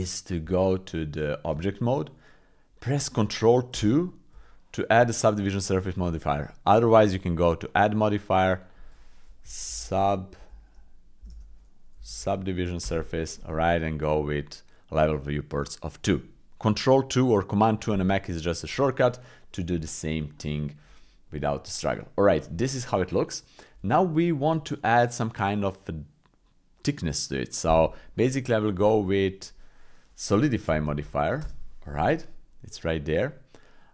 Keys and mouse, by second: 0.4 Tab, 3.7 ctrl+2, 6.4 click, 7.6-12.8 drag, 11.3 BackSpace, 15.5 click, 19.8 shift+middle click, 20.4 middle click, 21.8 middle click, 23.8 middle click, 28.6-31.4 drag.